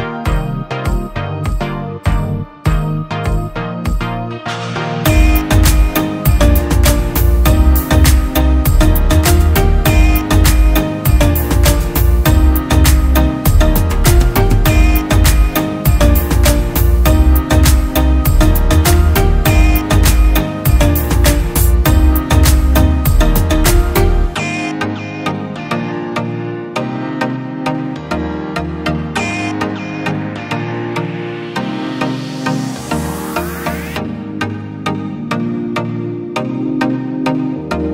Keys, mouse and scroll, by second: 8.8-9.7 typing, 15.5 typing, 22.9-24.0 typing, 28.4-29.6 typing.